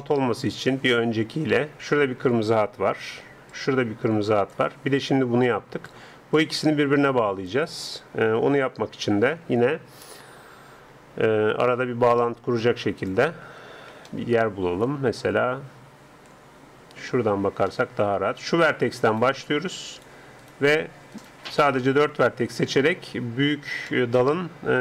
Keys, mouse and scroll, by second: 3.3-6.3 d, 3.5-8.2 drag, 6.4 d, 7.5 d, 8.1 d, 9.6 n, 13.0-14.9 drag, 13.5 n, 17.7-19.2 middle drag, 19.2-23.1 right drag, 19.2-23.8 middle drag, 23.9-24.8 middle drag.